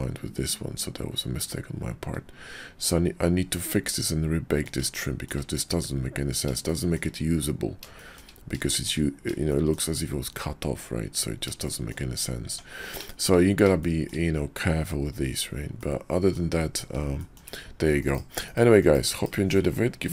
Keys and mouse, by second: 3.5 click, 4.2 middle click, 5.0 shift+click, 6.6 shift+click, 7.9 shift+click, 8.7 shift+click, 9.5 shift+click, 11.7 shift+drag, 12.6 Tab, 13.1 shift+drag, 13.8 shift+drag, 15.8 click, 17.2 shift+drag, 18.0 KP_5, 18.4 KP_5, 18.7 KP_5, 19.1 KP_5.